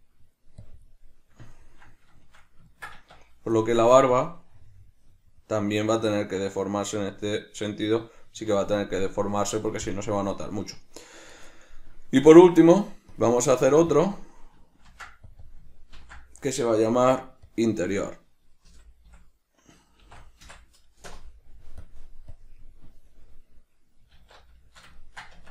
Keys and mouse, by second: 0.0 middle click, 1.2 middle click, 2.3 middle click, 2.9 middle click, 3.2 Tab, 4.3-11.1 drag, 11.1-13.3 middle drag, 13.3-14.1 drag, 14.2-15.5 drag, 15.6-22.0 drag, 22.4-24.8 drag, 24.3 alt+q, 24.8-25.5 shift+middle drag, 25.4 Tab.